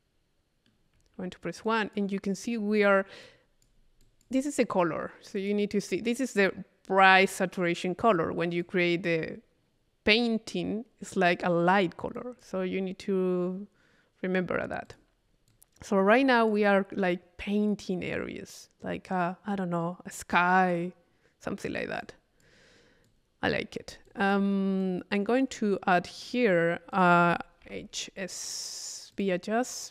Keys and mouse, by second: 1.6 click, 3.2-4.6 drag, 5.4 click, 5.9-6.9 drag, 8.6 click, 9.4 click, 9.7 click, 12.2 click, 14.9-16.9 drag, 22.0 click, 23.1 click, 24.1 click, 24.8 click, 26.2 right click, 26.9 click, 27.5 click, 29.1 click.